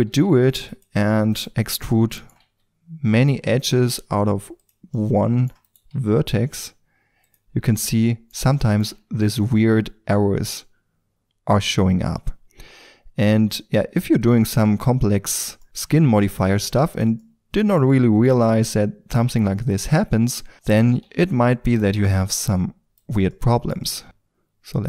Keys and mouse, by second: 0.0 e, 2.4-3.2 middle drag, 2.4 e, 3.2-3.6 drag, 3.6-4.6 right drag, 3.7 e, 5.8 e, 8.9 g, 10.4-10.8 drag, 14.3-15.6 middle drag, 15.8 g, 17.2 drag, 17.4-18.5 drag, 19.0-21.0 drag, 21.0 alt+s, 22.0 g, 23.3-23.8 drag, 23.8 g.